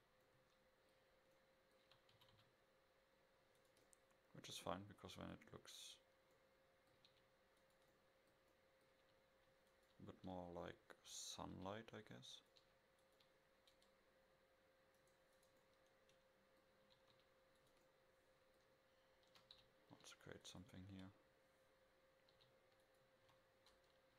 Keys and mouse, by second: 0.4-1.9 middle drag, 2.2 r, 3.9-4.3 middle drag, 6.1 middle click, 7.1 r, 9.1 r, 10.3 KP_7, 11.6 r, 12.6 g, 15.0 right click, 16.6-17.2 middle drag, 17.2 shift+d, 19.4 f, 19.6 g, 20.9 KP_0, 22.4 g, 23.3 a.